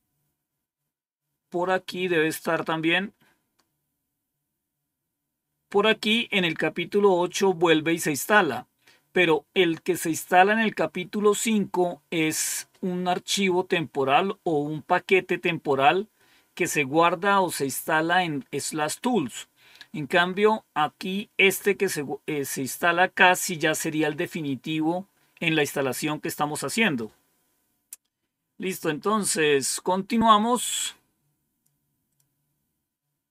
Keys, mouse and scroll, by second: 0.6-5.7 scroll down 2, 9.9-10.8 scroll up 1, 20.2-21.4 scroll down 1, 28.9-29.4 scroll up 2, 29.4-30.0 scroll up 1, 30.0-31.4 scroll up 1, 32.0 click.